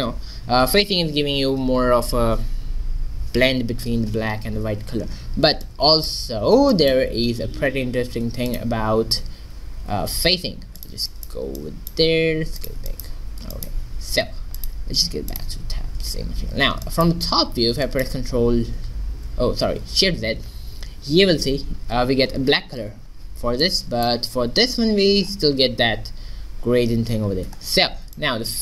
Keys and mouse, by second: 5.2-6.6 middle drag, 6.6 shift+z, 7.4 shift+a, 9.4 g, 11.1 middle click, 12.1 s, 16.0 q, 20.4 shift+z.